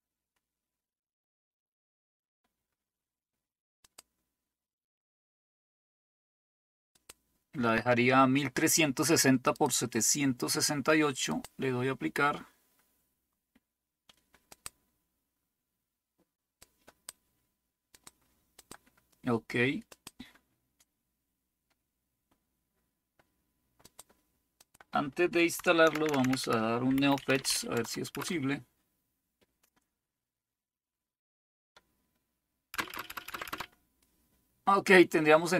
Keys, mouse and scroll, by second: 0.0-1.5 scroll down 1, 3.9 click, 7.0 click, 9.5 click, 11.3 click, 14.5 click, 16.6 click, 17.9 click, 18.6 click, 19.9 click, 23.8 click, 24.4 click, 25.9 ctrl++, 26.1 ctrl++, 26.2 ctrl++, 26.7-28.0 typing, 28.1 Return, 32.7 Return, 32.9 Return, 33.1 Return, 33.3 Return.